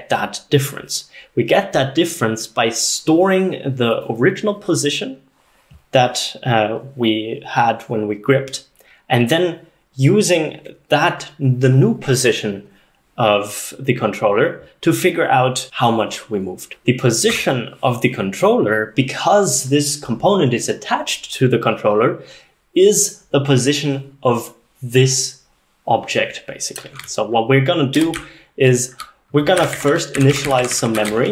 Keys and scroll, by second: 28.0 Escape, 28.2-31.3 typing.